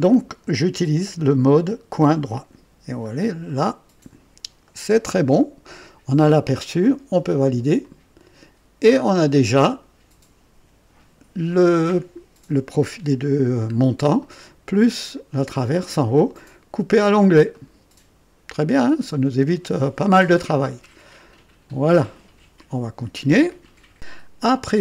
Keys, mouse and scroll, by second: 1.0 click, 1.9 click, 2.9 scroll down 1, 3.4-4.2 right drag, 4.6-5.9 right drag, 7.7 click, 8.9 scroll down 1, 9.4 right click, 13.6-13.9 scroll up 2, 14.1 right click, 15.6-15.9 scroll up 1, 16.1 right click, 17.4-18.2 right drag, 18.6-19.1 scroll down 1, 19.4-20.2 right drag, 20.6 scroll down 1, 21.0-21.6 right drag, 24.2-24.6 scroll up 1.